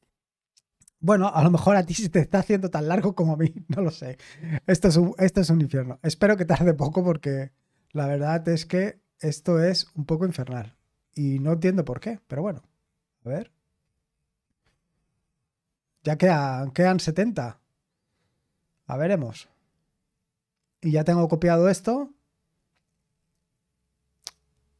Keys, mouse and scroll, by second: 7.9-9.1 scroll up 6, 9.1-10.1 scroll down 3, 10.4-13.3 scroll up 3, 13.5 scroll up 2, 13.9-15.8 scroll down 3.